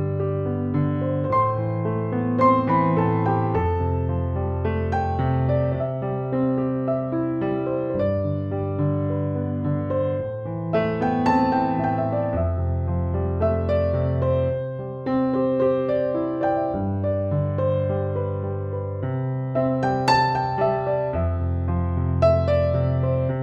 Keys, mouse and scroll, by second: 5.7 click, 9.7 ctrl+click, 10.3 ctrl+g, 11.0 click, 15.4 ctrl+-, 16.0 ctrl+-, 16.7 ctrl+=, 17.8 Tab, 19.1 ctrl+=, 21.2 click.